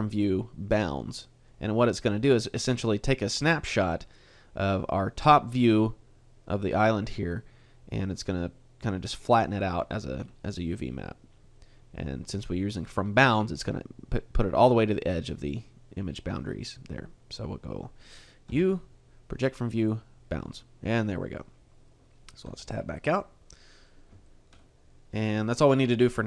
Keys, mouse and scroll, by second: 18.5 u, 22.6 Tab, 23.2 middle click, 24.7 shift+middle click.